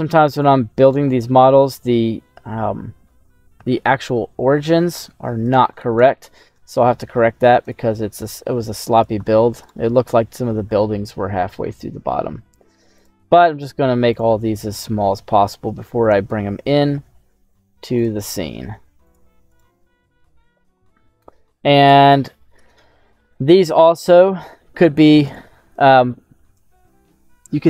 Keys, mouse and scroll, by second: 0.8 right click, 4.8 a, 5.6 right click, 5.9 right click, 6.5 s, 7.6 click, 8.2 ctrl+a, 9.6 right click, 10.7 s, 12.9 click, 13.4 ctrl+a, 14.8 shift+middle click, 15.3 shift+middle click, 16.0 right click, 16.7 s, 17.9 click, 18.3 ctrl+a, 19.5 right click, 20.2 s, 21.8 click, 22.6 s, 23.2 middle click, 25.3 right click.